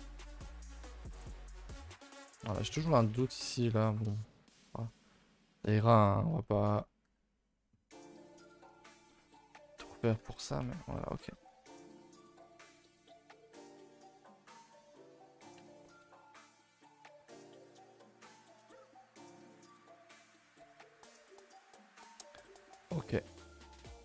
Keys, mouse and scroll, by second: 1.8 middle click, 2.3-3.3 scroll up 8, 2.6 shift+middle click, 3.1 middle click, 4.8 click, 5.1-7.0 middle drag, 7.0 g, 8.3 middle drag, 9.1-10.0 middle drag, 10.0 a, 10.2 a, 10.3 KP_0, 12.0 middle click, 12.5-13.1 scroll up 9, 12.8 shift+middle drag, 13.1-13.8 middle drag, 14.1 middle drag, 14.3 middle drag, 14.7-15.1 middle drag, 15.2-15.6 middle drag, 15.6 Tab, 15.8 middle click, 16.0-16.4 scroll up 2, 16.4 click, 16.6 shift+click, 16.8 middle drag, 18.2 middle drag, 18.4 Tab, 18.7 a, 18.8 a, 18.9-19.2 middle drag, 19.2 ctrl+s, 19.3 middle drag, 19.7 middle drag, 20.4 scroll down 3, 20.6-22.7 middle drag, 23.1 middle click, 23.2-23.6 scroll up 1, 23.6-24.0 middle drag.